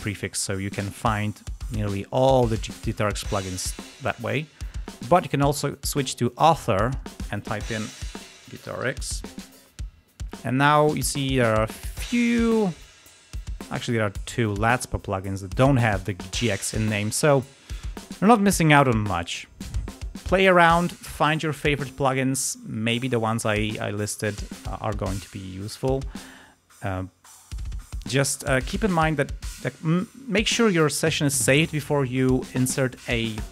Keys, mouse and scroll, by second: 0.0-0.5 scroll down 2, 0.7-1.1 scroll down 2, 2.0-2.6 scroll up 2, 4.8 click, 6.2 click, 6.8 click, 7.5-9.3 typing, 11.5 click, 13.8 click, 14.1 click, 14.6 scroll down 2, 16.0-16.6 scroll up 2, 25.0-25.5 scroll up 4, 26.2-26.9 scroll down 4, 26.9 space, 27.5 scroll down 2, 28.0-28.3 scroll up 2, 28.9 scroll down 2, 31.6 space.